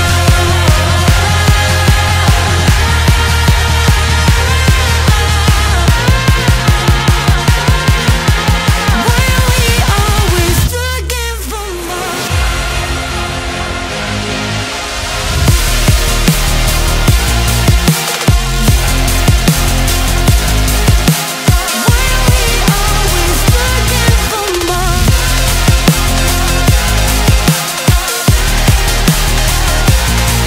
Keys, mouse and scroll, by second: 0.7 click, 2.8-5.7 middle drag, 5.7 click, 6.1 Tab, 6.8 scroll down 5, 7.8 shift+click, 9.3 ctrl+j, 10.5 Tab, 11.0-11.7 scroll up 6, 12.8 click, 13.7-14.2 scroll up 1, 14.2 scroll down 1, 14.5-16.0 middle drag, 16.0 b, 17.6 b, 18.7-22.7 middle drag, 22.7 ctrl+m, 27.8 ctrl+m, 30.1-30.4 scroll down 1.